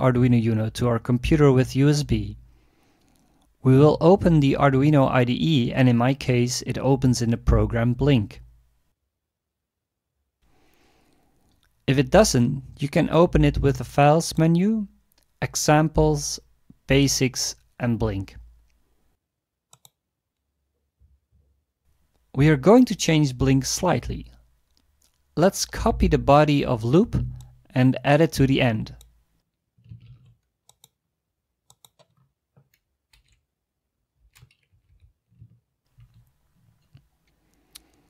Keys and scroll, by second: 30.0 ctrl+c, 33.1 Return, 34.7 Left, 34.9 Left, 35.9 ctrl+v.